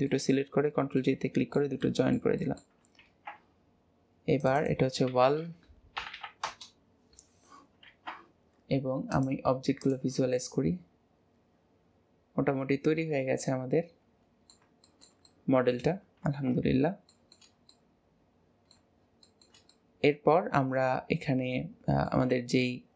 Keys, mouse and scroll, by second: 0.0-0.6 middle drag, 0.6-1.0 scroll down 4, 1.0-3.0 middle drag, 3.0 ctrl+s, 4.4 click, 4.6-6.2 drag, 6.2 l, 7.9 ctrl+s, 9.2 click, 9.8 click, 10.4-13.4 middle drag, 14.8-16.2 shift+middle drag, 16.2 ctrl+s, 16.6 scroll up 2, 17.1-22.8 shift+middle drag.